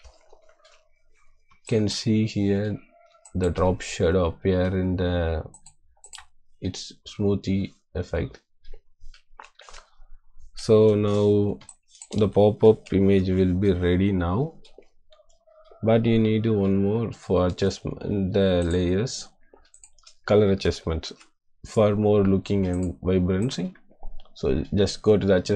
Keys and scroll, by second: 1.6 space, 3.1 space, 11.6 space, 20.6 ctrl+g.